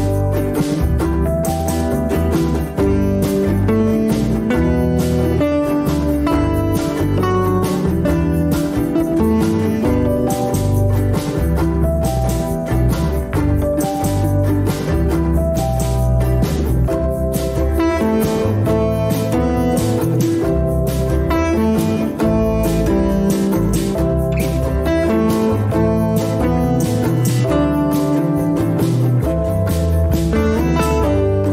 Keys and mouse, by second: 2.8 Tab, 3.5-4.0 shift+middle drag, 4.9-6.1 middle drag, 7.8-8.8 drag, 8.8-12.9 middle drag, 13.0 Tab, 15.6 click, 16.0 click, 17.1-17.6 middle drag, 18.0 Tab, 18.8 Tab, 19.3 middle click, 19.7 middle click, 20.8 middle click, 23.9 ctrl+r, 27.6 ctrl+r, 30.3 alt+z.